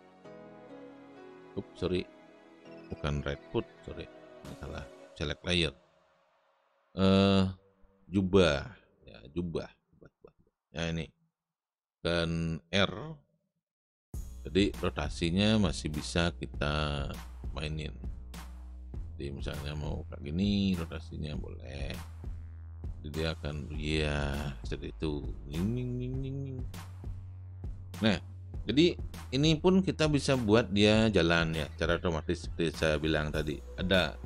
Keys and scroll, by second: 3.7 ctrl+z, 13.7 r.